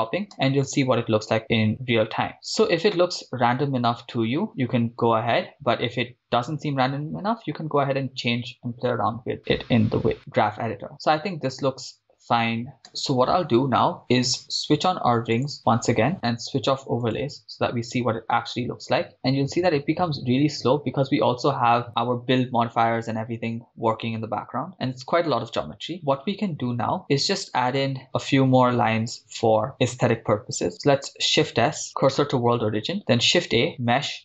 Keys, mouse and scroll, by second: 0.0 click, 0.3 shift+space, 7.1 shift+space, 10.2 shift+space, 13.0 shift+space, 16.1 click, 17.5 click, 19.1 click, 19.1 middle click, 19.1 scroll down 2, 20.7-21.1 drag, 27.9 click, 30.7 shift+s, 33.0 shift+a.